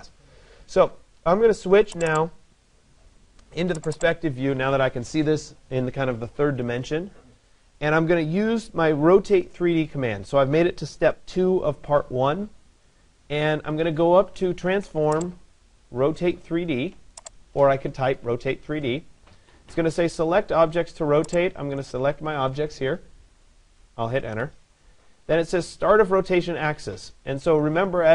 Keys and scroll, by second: 24.0 Return.